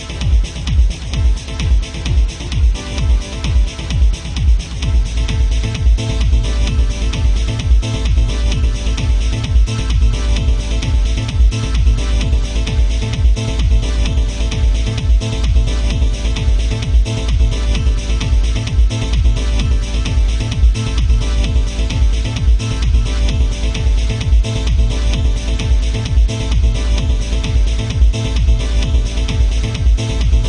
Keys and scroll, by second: 3.3 ctrl+z, 4.9 ctrl+z, 5.8 ctrl+z, 8.1 ctrl+z, 8.8 ctrl+z, 11.6 ctrl+z, 14.7 ctrl+z, 19.9 ctrl+z, 20.5 ctrl+z, 21.5 ctrl+z, 22.3 ctrl+z, 23.4 ctrl+z.